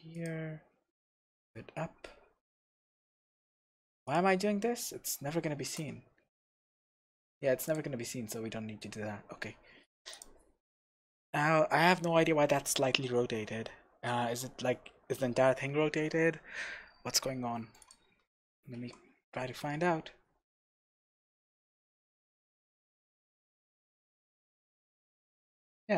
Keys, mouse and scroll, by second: 0.3 click, 1.0 g, 4.1 click, 4.4 scroll down 1, 4.6 scroll up 1, 4.8-5.7 scroll down 1, 5.7 KP_0, 6.7-7.1 scroll up 1, 7.1-10.1 shift+middle drag, 7.5 x, 7.9-9.2 scroll down 2, 9.2-10.1 scroll down 1, 10.1 click, 10.5-11.4 scroll up 2, 11.4 scroll up 1, 12.1-12.5 scroll down 1, 15.9 scroll up 1, 17.4 scroll down 1, 17.8 click, 18.2 q, 18.9 Escape, 19.1 Tab, 19.7-20.2 scroll down 2, 20.2-20.8 scroll up 2, 20.8-25.9 middle drag, 22.2-23.2 scroll up 3, 25.5-25.9 scroll down 1.